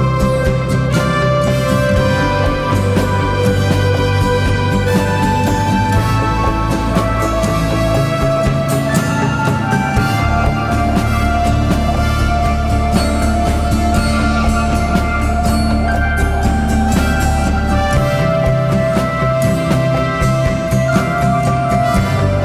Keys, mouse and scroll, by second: 10.4-10.7 typing, 20.9 typing.